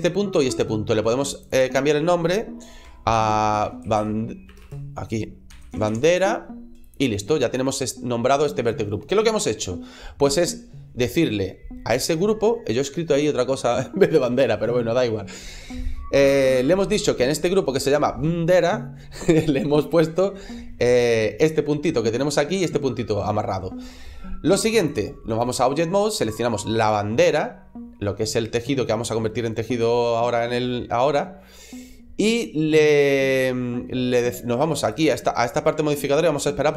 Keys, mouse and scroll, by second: 1.2 click, 2.8 click, 4.4 BackSpace, 24.7 click, 36.6 click.